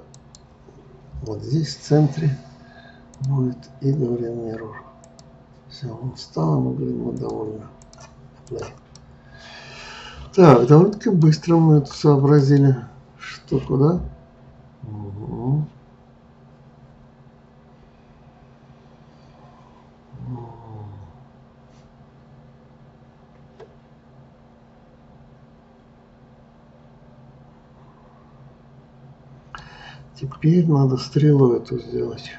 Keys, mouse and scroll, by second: 3.2-6.2 drag, 7.1-8.6 drag, 9.0-11.3 middle drag, 11.3 scroll down 1, 12.4-15.4 middle drag.